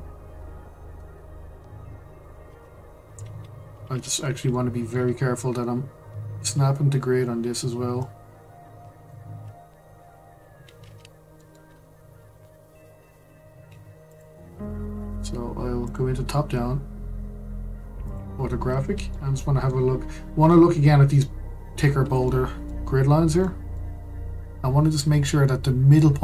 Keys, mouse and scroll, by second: 2.5 ctrl+z, 4.0-4.5 scroll up 1, 4.5-7.7 shift+middle drag, 8.0 click, 9.2 ctrl+z, 10.6 shift+d, 15.8 click, 18.0 click, 18.7-19.1 scroll up 1, 19.1-22.1 shift+middle drag, 22.2-22.8 shift+middle drag, 22.8-23.4 scroll up 5, 23.4-26.2 shift+middle drag.